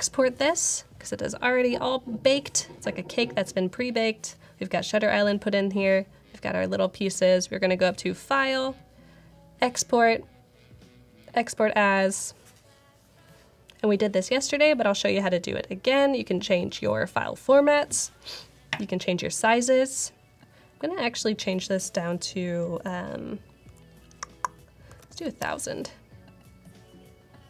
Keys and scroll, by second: 24.5-25.8 typing.